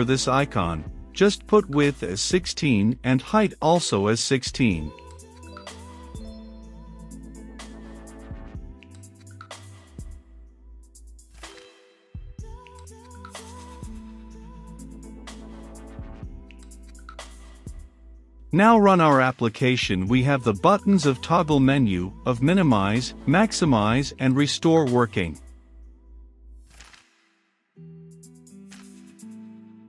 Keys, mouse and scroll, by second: 1.1-2.1 middle drag, 2.1-6.7 drag, 7.1 ctrl+s, 8.1 middle click, 9.0-29.8 drag.